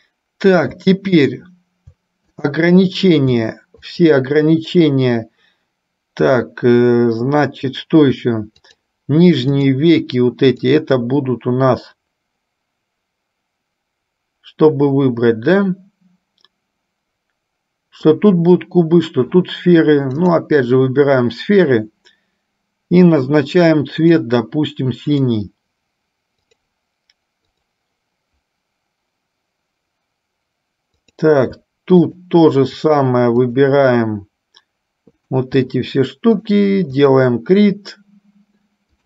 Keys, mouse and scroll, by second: 1.5 shift+click, 2.6 click, 4.1 shift+click, 8.7 shift+click, 9.7 shift+click, 10.8 shift+click, 20.8 click, 24.2 click, 25.3-27.0 drag, 27.7 click, 32.2 shift+click, 33.1 shift+click, 35.3 shift+click.